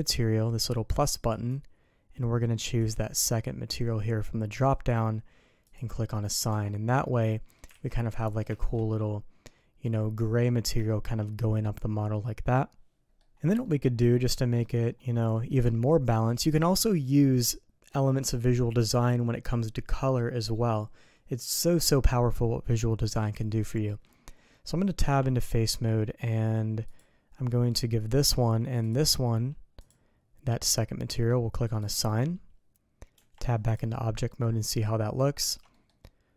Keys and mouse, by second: 1.3 click, 2.6-4.9 drag, 5.7 click, 6.5 Tab, 7.1 click, 7.8 alt+a, 8.1 drag, 8.5 shift+drag, 8.9-10.4 drag, 10.8 shift+click, 13.0 click, 13.6 click, 14.3 shift+click, 15.3 middle click, 23.1-23.8 middle drag, 24.9 Tab, 25.6 Tab, 26.8 click, 28.8 shift+click, 29.8 click, 31.8 click, 33.1 Tab, 34.3-34.7 middle drag, 34.7-35.4 drag, 35.4 alt+a, 35.7 click.